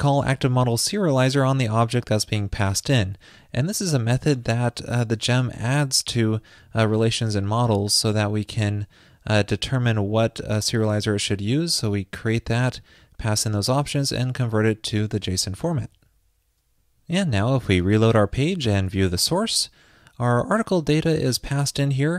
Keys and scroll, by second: 19.1 alt+super+u.